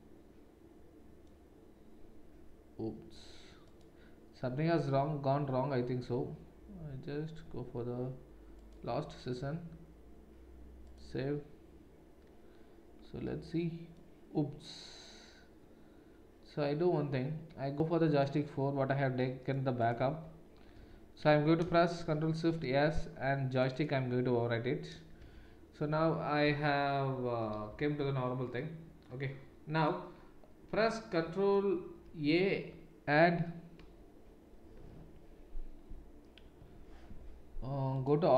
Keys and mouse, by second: 3.6-19.9 drag, 19.9-29.8 middle drag, 20.1 Tab, 20.8 Tab, 22.1 ctrl+shift+s, 25.2 Tab, 25.9 Tab, 27.7 z, 29.8 click, 29.8-38.0 middle drag, 32.1 ctrl+a, 38.0-38.3 drag.